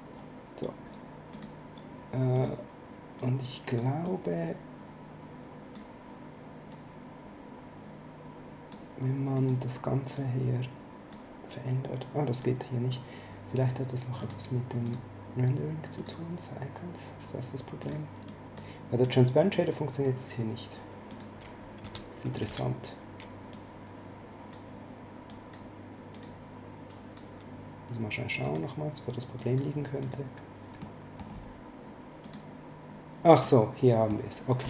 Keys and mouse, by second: 1.3 click, 6.7 click, 9.3 click, 12.4 click, 14.2 click, 15.9 click, 17.8 click, 21.1 click, 21.8 x, 22.3 click, 22.4 x, 23.5 click, 25.2 click, 28.4 click, 30.8 middle click, 32.2 click, 33.4 middle click.